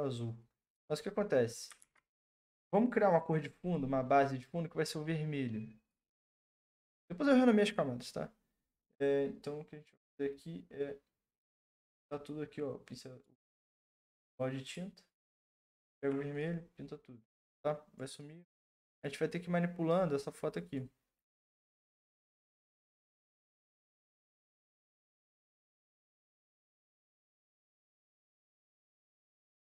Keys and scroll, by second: 1.8 ctrl+d.